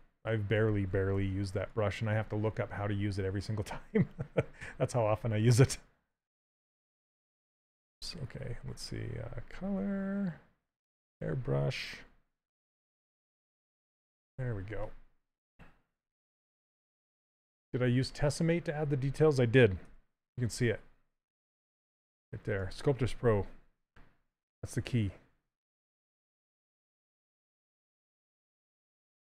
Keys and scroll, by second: 1.4 shift+f, 8.4 ctrl+z, 13.5 z, 20.1 shift+f, 23.0 shift+f.